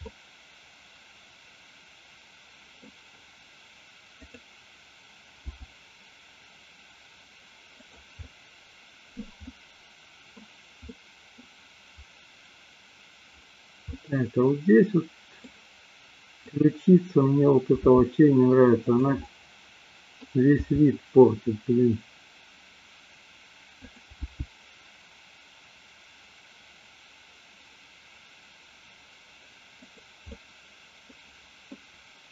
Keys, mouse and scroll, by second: 0.1-2.8 middle drag, 5.6 g, 8.2-9.2 middle drag, 9.6 middle click, 10.8 middle click, 13.8-15.5 middle drag, 16.3 click, 17.8 r, 19.2-20.3 middle drag, 20.7 r, 24.0 click, 24.2 g, 30.3-31.1 middle drag.